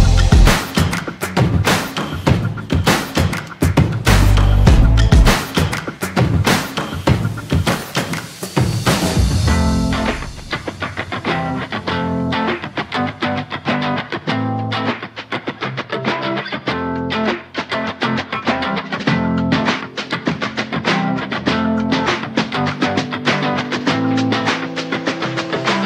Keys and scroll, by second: 23.5 ctrl+z.